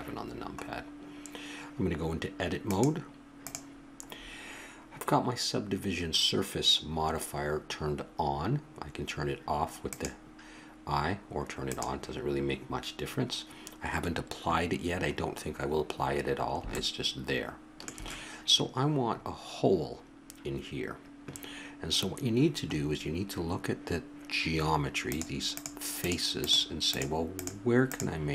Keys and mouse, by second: 2.6 click, 3.2-4.7 drag, 6.1-9.8 middle drag, 10.0-15.4 drag, 25.1-28.3 drag.